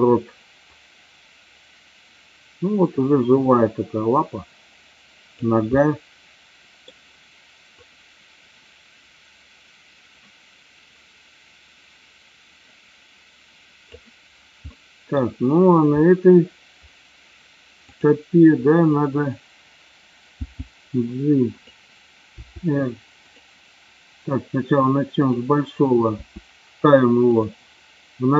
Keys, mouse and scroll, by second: 0.8-5.5 drag, 5.8-7.0 middle drag, 8.0-14.1 drag, 14.7-15.2 middle drag, 18.0 click, 20.5 g, 21.7 click, 22.3 r, 25.3-25.9 drag, 26.2 r, 27.3 click.